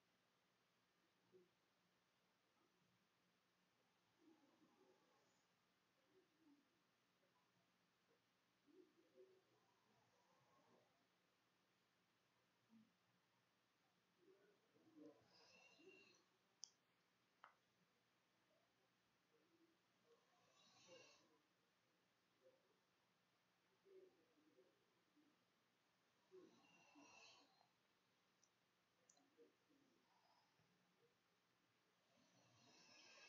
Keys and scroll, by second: 3.5-7.0 typing, 6.1 shift+Return, 7.1 Return, 8.1 shift+Return, 8.2-14.0 typing, 10.7 Tab, 12.9 shift+Return, 14.1 Return, 15.6 ].